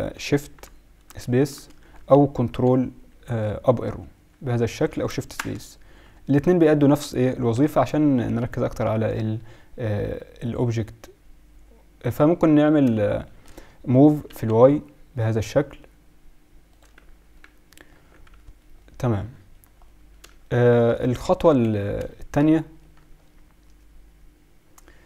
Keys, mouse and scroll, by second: 1.0 shift+space, 1.5 shift+space, 2.6 ctrl+Up, 3.0 ctrl+Up, 3.8 ctrl+Up, 5.4 shift+space, 6.0 shift+space, 6.4 shift+space, 7.4 ctrl+Up, 10.5-12.3 drag, 14.0 g, 16.9 z, 17.9 z, 21.4 KP_1.